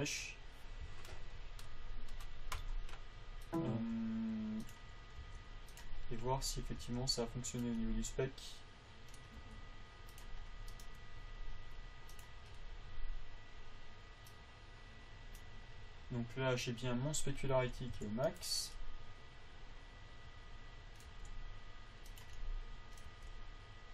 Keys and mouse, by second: 5.6 g, 6.6 click, 7.2 g, 9.8 g, 11.1-13.3 drag, 18.3 a, 21.4 g, 23.5 g.